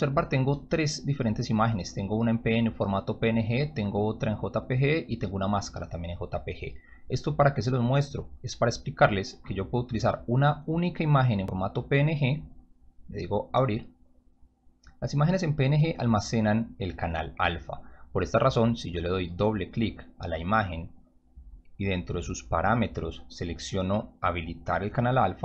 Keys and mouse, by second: 0.5 click, 1.2 click, 2.0 click, 3.2 click, 4.7 click, 6.2 click, 7.8 click, 11.9 click, 13.6 click, 15.0-15.3 drag, 15.7-16.4 drag, 19.0 click, 19.2 click, 21.1-22.7 drag.